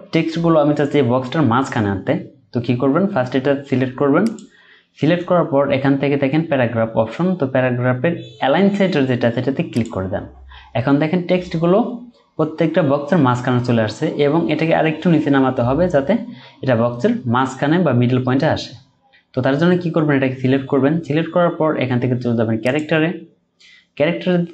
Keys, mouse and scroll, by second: 18.7-20.8 scroll up 1.